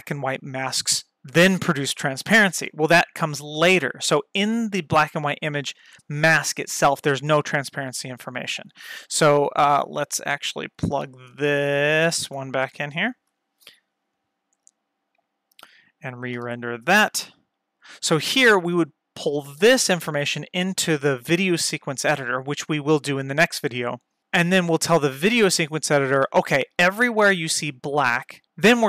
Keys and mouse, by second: 6.8 click, 9.6 click, 12.0 ctrl+shift+click, 13.1 ctrl+shift+click, 17.1 F12.